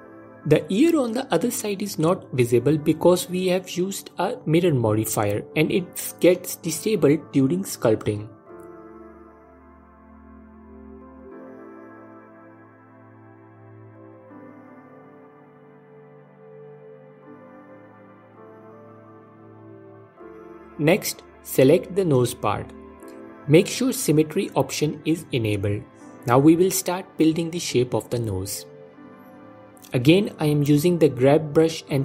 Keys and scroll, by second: 1.8 f, 5.5 f, 11.1 ctrl+Tab, 18.8 ctrl+Tab, 22.3 f, 26.9 alt+q, 28.0 ctrl+z, 29.9 f.